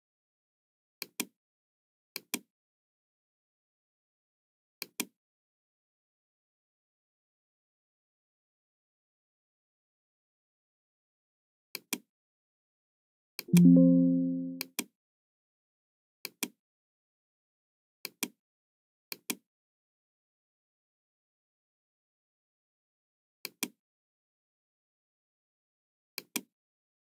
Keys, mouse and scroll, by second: 1.0 click, 2.1 click, 4.7 click, 6.4 KP_1, 6.6 KP_9, 6.9 Return, 8.6 KP_9, 8.6 KP_1, 11.7 click, 13.3 click, 14.5 click, 16.2 click, 17.9 click, 19.2 click, 20.3 KP_3, 20.8 Return, 23.4 click, 26.0 click.